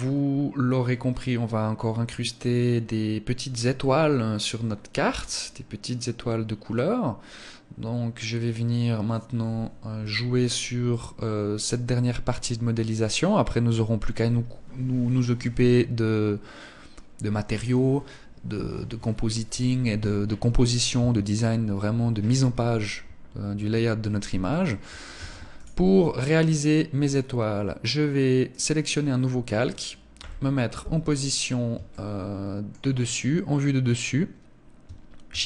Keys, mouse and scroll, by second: 23.7 Escape, 24.6 ctrl+s, 27.9 click, 31.3 shift+middle click, 34.7 shift+a.